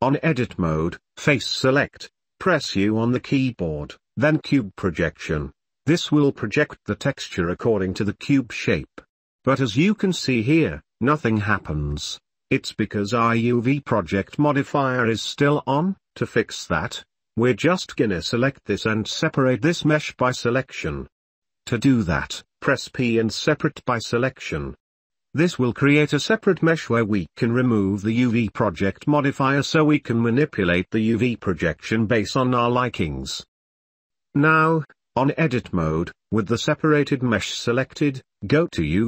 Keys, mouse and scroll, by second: 0.6 Tab, 3.8 u, 6.4 ctrl+z, 7.6 u, 13.1 click, 18.9 middle click, 20.0 shift+middle click, 20.3-22.2 shift+middle drag, 22.2 p, 24.6 click, 32.5 click, 36.1 u, 37.3 Tab, 38.5 click.